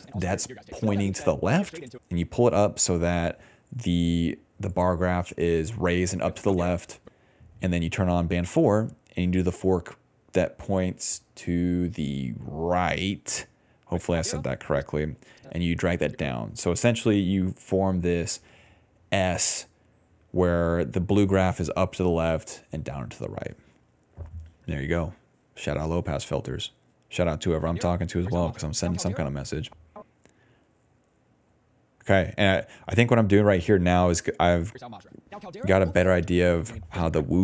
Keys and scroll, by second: 0.6 d, 1.0 d, 1.9 space, 3.5-7.0 typing, 9.5 d, 9.7 d, 13.8 space, 14.7 space, 17.8 d, 21.5 s, 23.0-27.4 typing, 28.8 s, 29.2 space, 32.0 s, 32.1 s, 34.6 space, 34.8 d, 35.6 s.